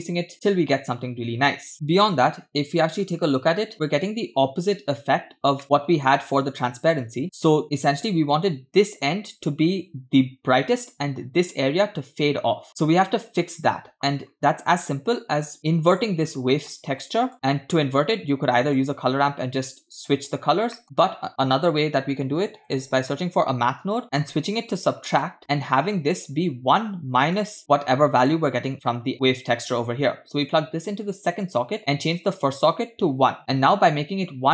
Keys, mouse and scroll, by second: 5.6 middle click, 6.0-6.5 scroll down 2, 6.5 click, 14.2-14.9 scroll down 2, 15.0-15.5 drag, 15.6 click, 16.4-16.8 scroll up 3, 16.5 middle click, 17.3 click, 17.6 middle click, 18.0 scroll down 1, 18.7 click, 20.5-20.8 scroll up 1, 20.8 middle click, 20.8 shift+a, 24.0 x, 24.0 shift+a, 25.8-26.2 scroll up 2, 26.2-27.6 drag, 27.7 middle click, 28.2-29.1 drag, 29.1 middle click, 30.5 drag, 31.5 click, 32.3-33.4 drag.